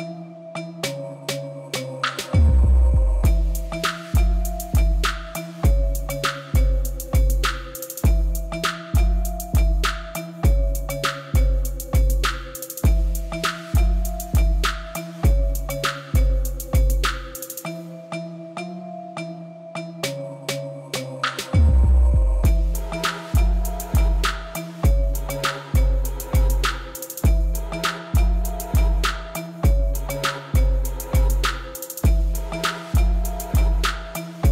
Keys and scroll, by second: 4.0 Tab, 8.0 Tab, 9.7 ctrl+r, 11.8 s, 12.0 0, 12.2 Return, 12.8 1, 13.1 shift+z, 14.8 x, 16.9 shift+s, 17.6 Tab, 18.2 shift+z, 31.3 Tab, 33.1 Tab.